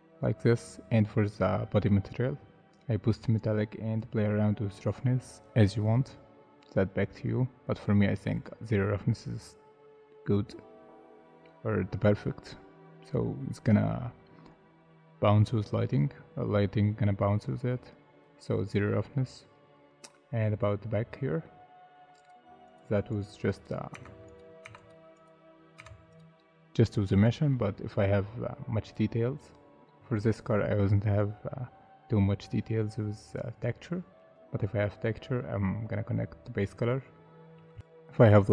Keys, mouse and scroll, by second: 0.2 middle click, 18.9 scroll down 1, 20.1 middle click, 20.9-21.4 scroll up 1, 21.4 middle click, 22.6 double click, 23.9 Tab, 24.6 Tab, 25.3 double click, 25.8 Tab, 27.5 middle click, 37.4 scroll down 1.